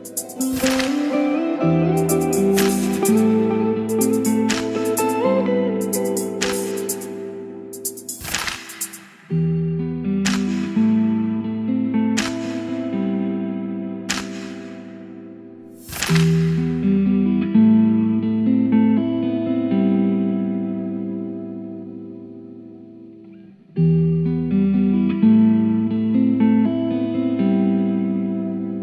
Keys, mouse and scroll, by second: 0.7 Return, 1.1-3.8 typing, 3.8 Down, 4.0 Return, 5.1 click, 6.0 ctrl+c, 6.4 click, 7.0 Return, 8.1-10.9 typing, 11.5 Return, 12.2 ctrl+v, 14.2-15.6 drag, 15.6 Return, 16.1 Return, 17.1-19.0 typing, 20.3 Down, 21.3 Up, 21.5 Return, 22.4-27.9 typing.